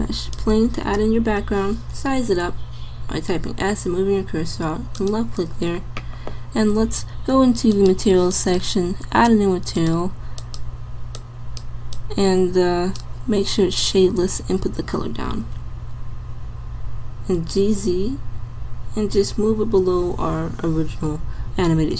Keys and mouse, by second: 1.9 s, 7.7-8.7 drag, 15.3 g.